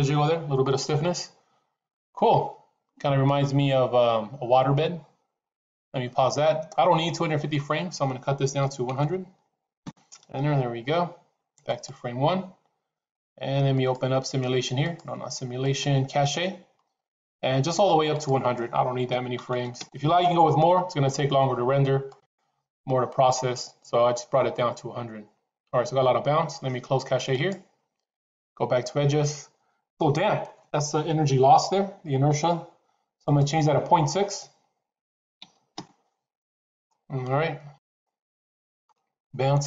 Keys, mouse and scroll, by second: 5.7 click, 7.2-10.7 drag, 8.8 KP_0, 11.6 click, 13.8 click, 14.7 click, 15.4 click, 18.0-21.2 drag, 19.4 KP_0, 22.0 click, 27.2 click, 33.2-36.8 drag, 37.7 click.